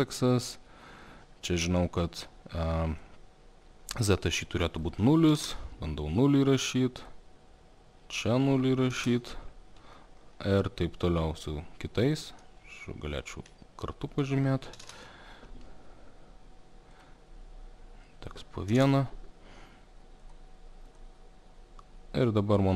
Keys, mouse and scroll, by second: 3.0 click, 4.9 click, 5.4 0, 5.4 KP_0, 7.1 click, 8.5 click, 9.0 0, 9.6 Return, 10.5 alt+middle click, 11.5 click, 12.2 click, 13.2 ctrl+click, 14.4 click, 14.8 0, 14.9 Return, 17.1 click, 18.3 click, 18.7 0, 18.8 Return, 20.4 click, 21.0 click.